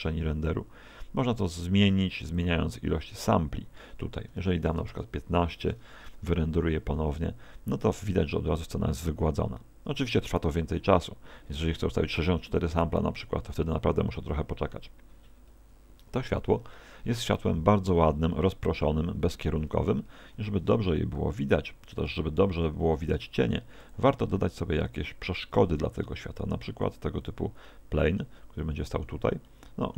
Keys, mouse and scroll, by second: 19.2 Escape, 20.4 shift+a, 22.8 r, 23.9 ctrl+click, 24.3 s, 25.4 click, 25.6 g, 27.5 click, 27.7 middle click, 28.6 middle click, 29.5 middle click.